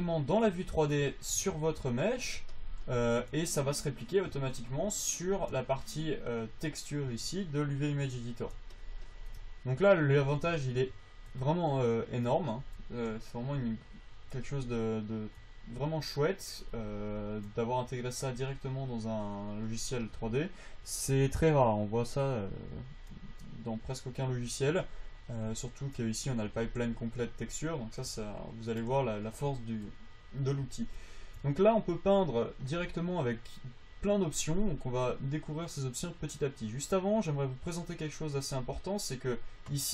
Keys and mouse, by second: 1.9-5.0 middle drag, 9.1-11.3 drag, 13.8-21.3 drag, 21.3-26.2 right drag, 26.2-27.6 drag, 32.7-37.9 drag, 34.3 right click.